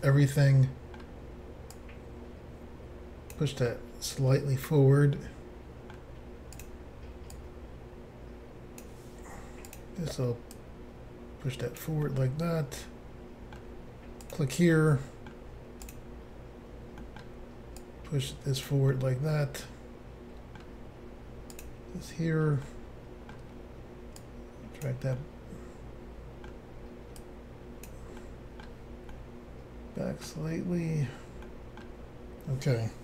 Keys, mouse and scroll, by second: 0.3 middle click, 1.7 click, 3.7 middle click, 6.6 click, 6.7 click, 7.4 click, 9.7 click, 10.6 click, 12.1 middle click, 14.3 click, 14.4 click, 14.8 middle click, 15.9 click, 17.0 middle click, 17.8 click, 18.9 middle click, 21.6 click, 21.7 click, 22.7 middle click, 24.2 click, 25.2 middle click, 27.2 click, 28.2 middle click, 29.1 middle click, 31.5 middle click.